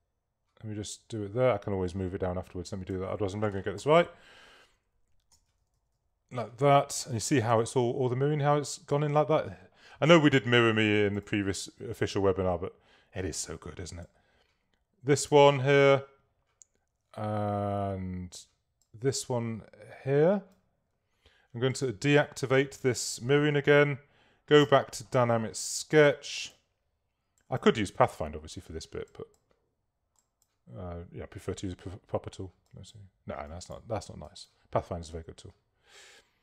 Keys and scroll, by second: 3.8 shift+v, 5.4 Down, 7.6 Down.